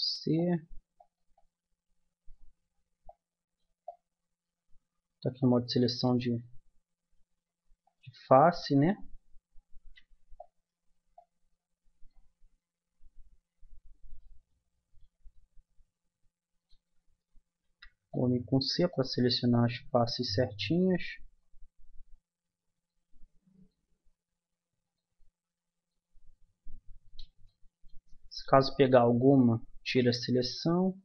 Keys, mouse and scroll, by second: 6.3-7.8 right drag, 7.8-9.6 drag, 9.8 c, 14.1 click, 14.7-17.6 middle drag, 17.7 c, 27.1-31.0 middle drag.